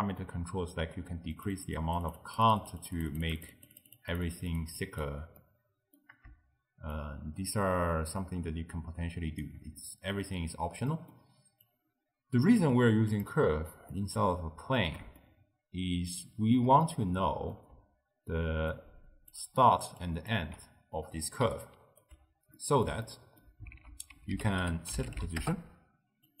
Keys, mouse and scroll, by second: 1.4-5.4 drag, 5.4-7.0 middle drag, 7.0-9.8 shift+drag, 9.8-10.6 middle drag, 10.6-11.0 scroll down 2, 11.0-11.7 middle drag, 11.7 click, 12.7 g, 14.0-17.8 middle drag, 17.8-22.1 typing, 18.7-19.4 drag, 20.1 click, 21.6 right click, 22.6-23.8 middle drag, 23.8 ctrl+a.